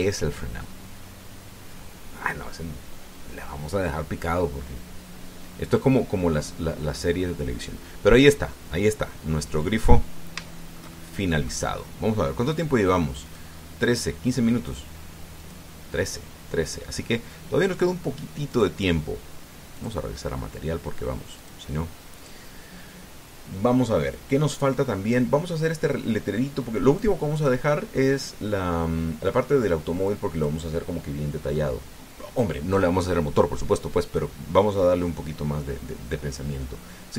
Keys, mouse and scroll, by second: 10.3-10.9 scroll down 2, 11.3-12.4 shift+drag, 13.3 click, 14.0 click, 15.3 click, 16.2 click, 19.3 click, 20.6 click, 22.2 click, 22.9 click, 24.9-26.1 drag, 27.8 click, 30.8 click.